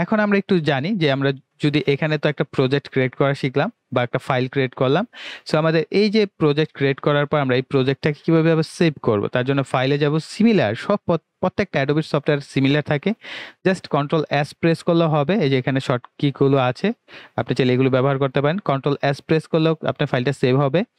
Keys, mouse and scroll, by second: 9.5 click.